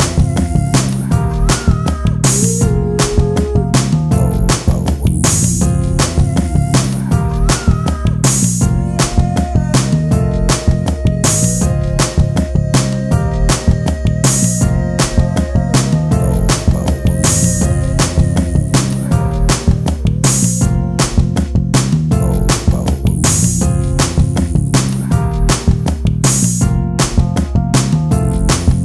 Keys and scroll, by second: 4.0 ctrl+space, 4.6 t, 10.9 ctrl+space.